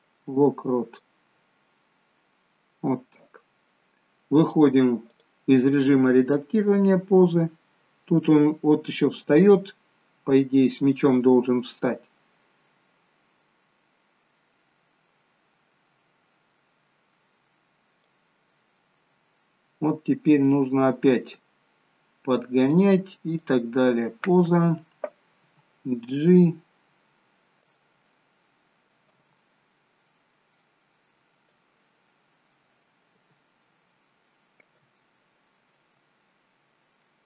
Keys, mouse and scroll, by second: 1.1-1.6 scroll down 3, 2.0-2.5 scroll down 1, 2.8-3.3 scroll down 1, 4.5 click, 7.4 click, 19.5-19.9 scroll up 9, 20.3 scroll up 1, 20.5 middle click, 22.6 click, 25.5 g, 28.0 middle click, 29.2 g, 31.8 middle click, 33.3 g, 35.8 s.